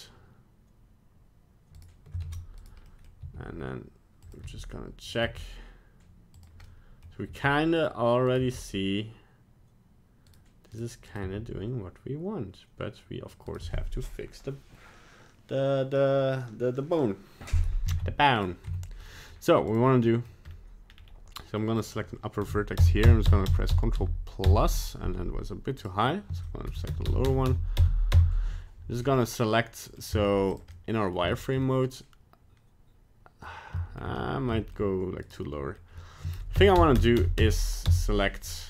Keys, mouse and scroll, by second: 1.8 right click, 2.3 ctrl+Tab, 2.6 right click, 2.9 middle click, 3.2 g, 4.5 r, 6.6 middle click, 7.3 g, 8.3 right click, 8.4 g, 10.8 right click, 11.1 right click, 11.2 g, 13.1 g, 17.9 ctrl+Tab, 18.4 right click, 18.7 Tab, 19.0 middle click, 19.7 right click, 20.2 middle click, 20.4 scroll up 2, 20.9 scroll down 2, 21.1 scroll up 1, 21.6 middle click, 22.8 ctrl+KP_Add, 23.0 ctrl+KP_Add, 23.3 ctrl+KP_Add, 23.5 ctrl+KP_Add, 23.7 ctrl+KP_Add, 24.0 ctrl+KP_Add, 24.4 ctrl+KP_Add, 25.8 right click, 26.7 ctrl+KP_Add, 26.9 ctrl+KP_Add, 27.1 ctrl+KP_Add, 27.2 ctrl+KP_Add, 27.5 ctrl+KP_Add, 27.8 ctrl+KP_Add, 28.1 ctrl+KP_Add, 29.0 middle click, 30.1 z, 30.7 middle click, 31.3 shift+middle click, 31.6 middle click, 33.8 shift+middle click, 34.2 scroll up 1, 34.5 shift+middle click, 35.2 right click, 35.4 middle click, 36.5 ctrl+KP_Add, 36.7 ctrl+KP_Add, 36.9 ctrl+KP_Add, 37.2 ctrl+KP_Add, 37.4 ctrl+KP_Add, 37.9 ctrl+KP_Add, 38.5 scroll down 3.